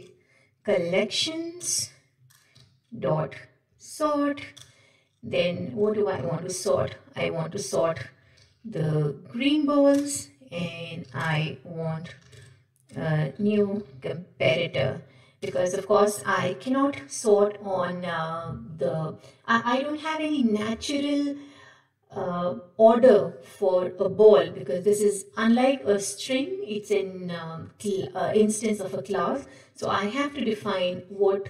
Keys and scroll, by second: 1.8 Return, 4.6 Return, 6.1 ctrl+p, 9.9 Return, 16.7 Return.